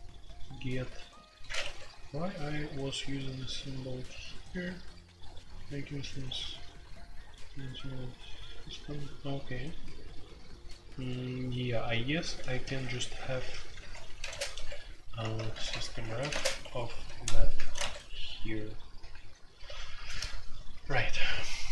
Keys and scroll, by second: 1.6 Escape, 1.7-3.6 typing, 10.0-19.6 typing, 14.5 Escape, 16.6 Escape.